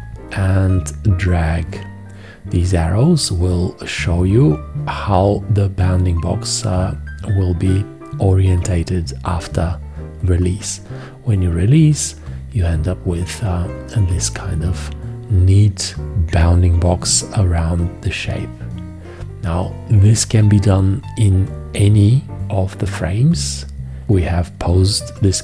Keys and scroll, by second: 20.3 v.